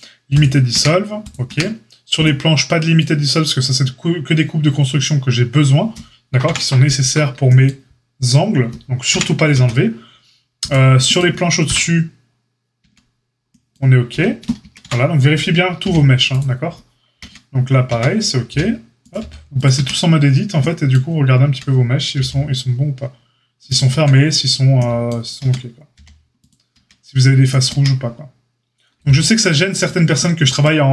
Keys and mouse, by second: 0.7 Tab, 1.4 Tab, 6.4 KP_Divide, 9.0 KP_Divide, 9.5 Tab, 11.6 KP_Divide, 12.7 Tab, 14.6 Tab, 14.8 KP_Divide, 15.8 h, 17.1 Tab, 17.8 Tab, 18.4 g, 19.1 h, 19.7 Tab, 21.4 Tab, 22.1 h, 23.6 click, 23.8 Tab, 25.3 Tab, 25.9 h, 26.7 Tab, 27.7 Tab, 28.9 h, 29.7 click, 29.8-30.9 middle drag.